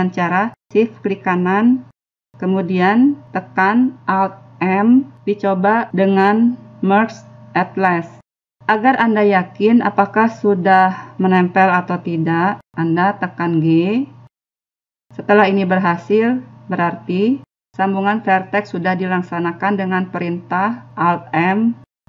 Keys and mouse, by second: 2.7 right click, 5.1 alt+m, 13.8 g.